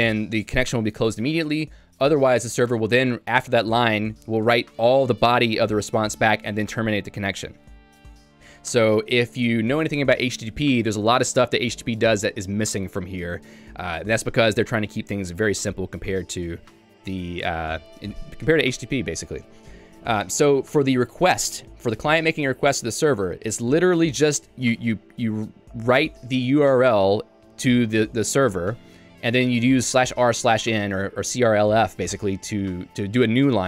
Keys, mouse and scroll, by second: 24.2-30.0 typing.